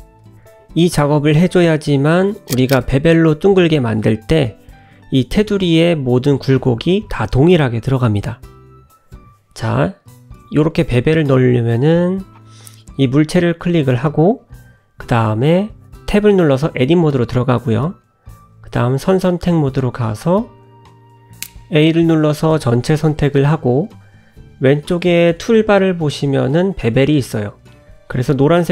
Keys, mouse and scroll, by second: 0.4 click, 2.3 n, 3.4 middle click, 4.2-4.6 scroll up 2, 4.7 shift+middle click, 5.1 scroll up 1, 5.1 middle click, 6.0 click, 6.5 Tab, 8.7 Tab, 9.0 click, 9.5 shift+click, 9.8 Tab, 11.6 Tab, 12.1 shift+middle click, 12.4-12.8 scroll down 2, 12.8 middle click, 13.4 click, 14.5 click, 15.3 click, 16.3 Tab, 18.1 click, 19.3 middle click, 20.2 click, 20.9 a, 26.6 click, 27.9 click.